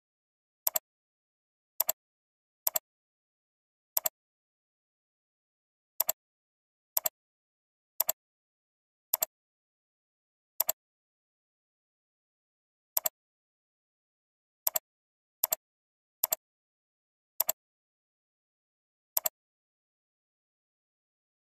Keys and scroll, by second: 3.4 ctrl+c, 4.8 ctrl+v, 5.5 ctrl+v, 9.0 ctrl+c, 12.0 ctrl+v, 16.1 ctrl+c, 18.6 ctrl+v.